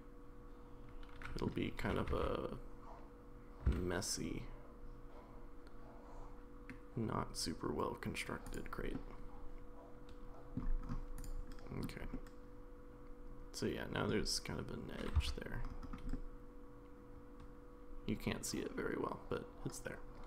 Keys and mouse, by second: 1.8 g, 8.9-10.6 middle drag, 12.1-14.1 middle drag, 15.2 Tab, 16.2-20.2 middle drag.